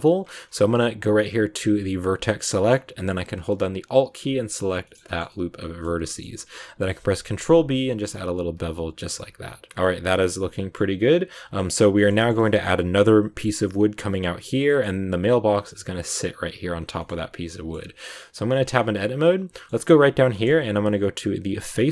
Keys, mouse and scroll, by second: 1.8 click, 2.4-3.9 middle drag, 3.9 alt+right click, 4.7-6.8 shift+middle drag, 6.8 ctrl+b, 9.0 Tab, 9.2 scroll down 2, 9.4-12.2 middle drag, 12.2 scroll up 2, 12.3-16.6 middle drag, 16.6 scroll down 2, 16.9 shift+middle click, 17.7 scroll up 1, 17.9 Tab, 18.4 shift+middle click, 18.6 scroll up 1, 18.7-19.8 middle drag, 19.8-20.2 scroll down 1, 20.2-21.4 shift+middle drag, 21.4 click.